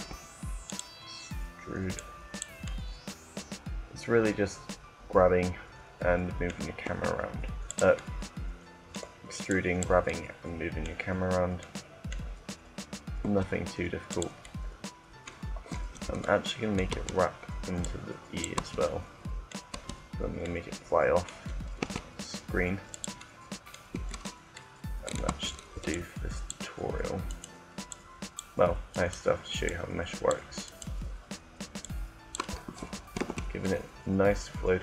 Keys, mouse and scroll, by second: 0.6-3.5 drag, 3.5 middle click, 6.6 e, 7.3 click, 9.5 click, 9.9 middle click, 10.1 click, 10.3 click, 10.6 middle click, 11.6 middle click, 11.8 middle click, 13.0 e, 14.0-15.9 drag, 15.5 Tab, 16.1 middle click, 16.6 Tab, 16.8 Tab, 17.6 click, 18.4 Tab, 18.6 click, 19.4 Tab, 21.6 e, 23.7 Tab, 24.9 Tab, 25.7-27.1 drag, 31.2 right click, 31.7 click, 33.0 Tab.